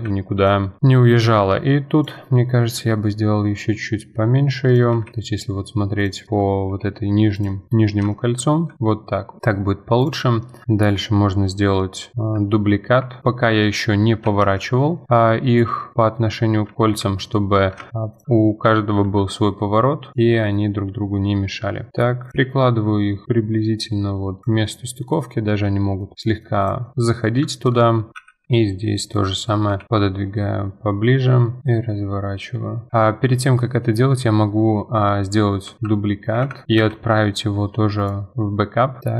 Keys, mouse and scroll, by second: 0.1-0.4 scroll down 4, 0.4 click, 0.6 middle drag, 0.8-2.0 scroll down 1, 2.0 click, 3.8 middle click, 6.3-6.7 middle drag, 6.7 g, 7.7 KP_1, 7.7 scroll up 5, 8.1 shift+middle click, 8.7 s, 8.9-9.4 scroll down 8, 9.4 middle click, 9.5 scroll up 4, 10.0 click, 10.4-12.1 middle drag, 12.1 KP_7, 13.2 shift+d, 15.9-16.7 middle drag, 16.7 KP_1, 17.5-18.4 scroll up 9, 17.9 shift+middle click, 18.1 click, 18.2 shift+middle click, 19.0 r, 24.8-25.2 middle drag, 25.2-25.7 scroll down 1, 25.7 middle click, 26.6 click, 26.9-27.5 scroll down 6, 26.9 middle drag, 27.5-28.1 shift+middle drag, 28.1 click, 28.2 KP_1, 28.4 KP_3, 28.9 scroll up 4, 29.7 g, 35.8 shift+d, 36.8 m, 39.0 click.